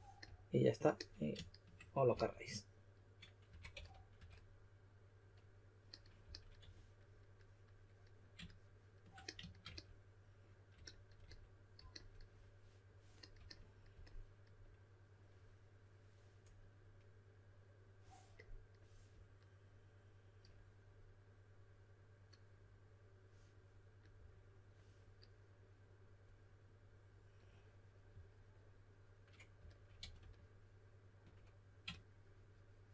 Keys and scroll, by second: 2.1 typing, 3.2-4.1 typing, 6.2-6.6 typing, 30.0 3.